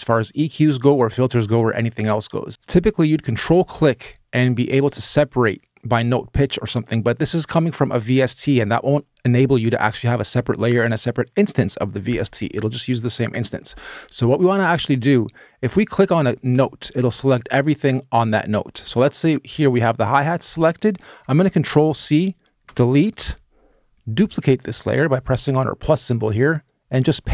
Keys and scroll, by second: 21.7 super+c, 22.4 BackSpace, 27.1 super+v.